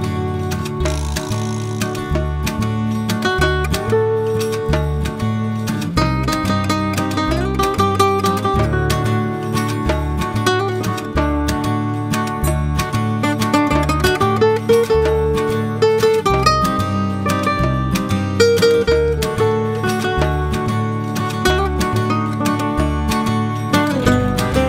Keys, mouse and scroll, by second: 1.5 click, 2.4-5.6 drag, 6.9 click, 7.5-10.6 drag, 12.3 click, 16.2-19.4 drag, 24.4 s.